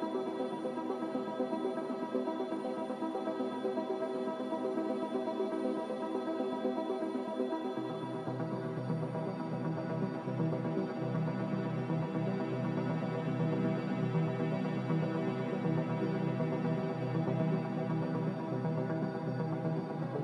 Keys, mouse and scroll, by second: 6.8 3, 9.5 2, 10.4 m, 14.1 a.